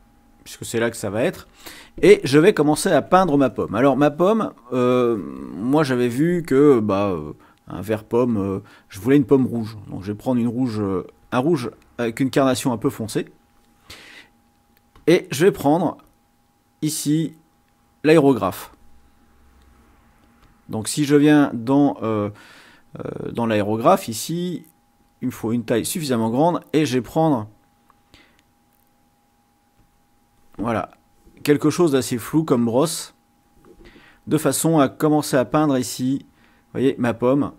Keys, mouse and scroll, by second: 4.4 click, 11.2 click, 15.0 click, 16.1-18.5 drag, 20.4 click, 25.0 click, 26.3-27.6 drag, 29.8 click, 32.4-33.7 drag, 35.1-36.4 drag, 37.5 click.